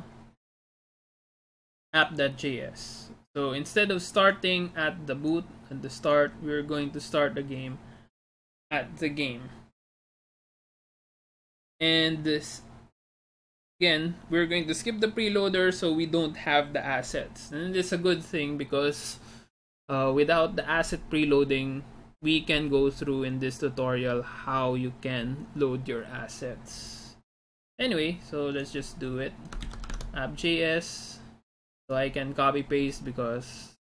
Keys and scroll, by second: 29.7 ctrl+c, 29.9 alt+Tab.